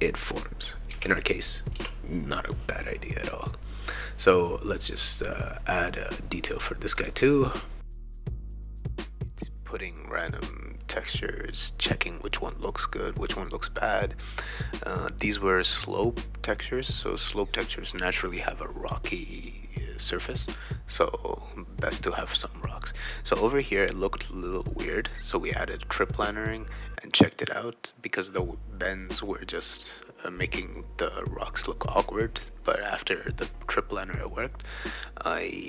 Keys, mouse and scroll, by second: 0.9 q, 1.8 e, 3.9 click, 4.8 click, 6.9 click, 7.9 click, 8.1 click, 11.0 click, 11.5 click, 12.5 click, 13.7 BackSpace, 14.8 BackSpace, 15.2 Tab, 15.7 click, 16.0-22.1 typing, 18.8 right click, 19.9 click, 21.6 click, 21.7 right click, 23.0 click, 23.2-24.3 right drag, 23.3-25.3 typing, 24.5 click, 24.6-27.3 right drag, 27.3 click, 27.9 click, 28.8-30.1 typing, 28.9 right click, 32.1 click, 32.3 click, 33.6 click, 34.1 click, 35.3 click.